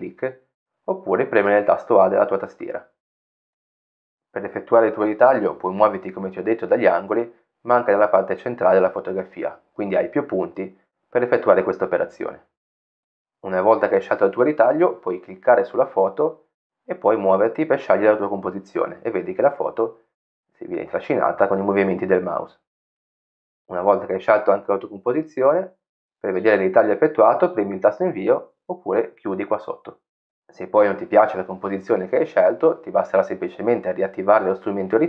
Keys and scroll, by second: 3.2 a.